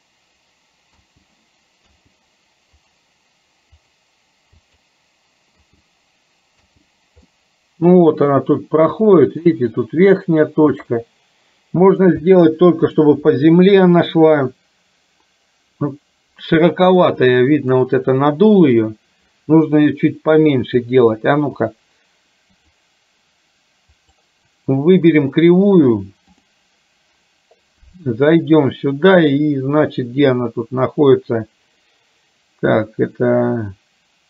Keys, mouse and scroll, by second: 1.2 space, 2.0 space, 3.0 click, 3.8 click, 4.6 click, 5.9 space, 6.9 space, 7.4-9.4 middle drag, 11.0-12.1 middle drag, 12.6 middle click, 17.5 middle click, 22.6 click, 24.2 click, 26.4 click.